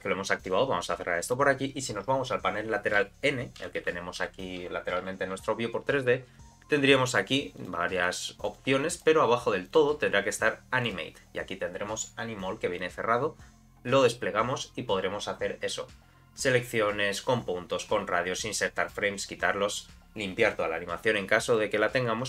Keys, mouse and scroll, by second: 1.2 click, 3.0 n, 3.6 n, 4.2 n, 7.6 click, 8.0 click, 8.5 click, 8.9 click, 9.6 click, 10.8 click, 12.8 click, 21.5 click, 22.0-22.2 scroll down 3.